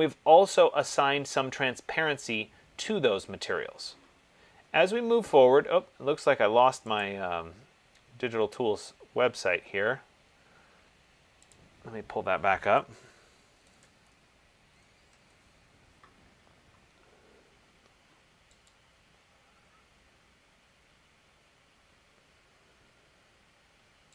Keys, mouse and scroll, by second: 7.2 click, 11.7 click, 13.7-14.3 typing, 15.3 Return, 19.0 click.